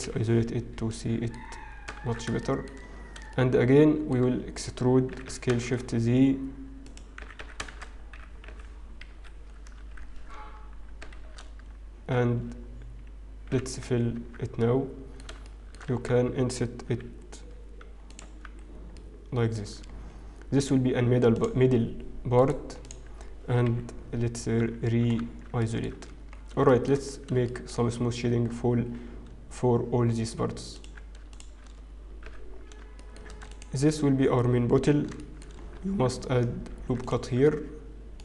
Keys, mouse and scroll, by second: 0.9 middle click, 1.7 scroll up 3, 2.0 shift+z, 2.4 shift+middle click, 2.8 scroll up 1, 3.3 shift+middle click, 5.5 e, 7.0 click, 7.2 e, 7.3 s, 7.7 shift+z, 8.5 ., 10.2 ctrl+z, 10.2-10.8 scroll down 1, 11.6 shift+z, 11.8-12.4 scroll up 1, 12.4-12.8 scroll down 1, 13.7 f, 14.2 Tab, 15.8 shift+middle click, 17.0 Tab, 17.2 i, 18.2 Tab, 18.6-19.4 scroll down 2, 19.4 middle click, 19.6-20.6 scroll down 3, 20.6 right click, 22.3 right click, 23.9-24.4 scroll down 3, 24.4-25.4 scroll down 4, 25.4-26.7 scroll down 4, 26.7 shift+middle click, 26.7-27.2 scroll down 1, 28.1 shift+middle click, 28.1-29.8 scroll up 5, 31.9 shift+click, 32.2 h, 33.0 shift+middle click, 35.2 shift+middle click, 35.2 click.